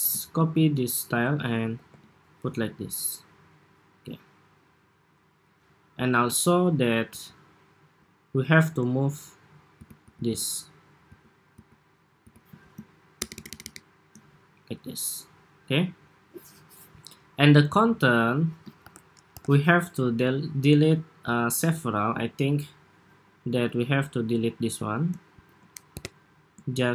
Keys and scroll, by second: 0.3 alt+super+c, 1.6 alt+super+v, 12.9 alt+Right, 13.2 alt+Right, 13.4 alt+Right, 18.5 super+-, 19.1 super+=.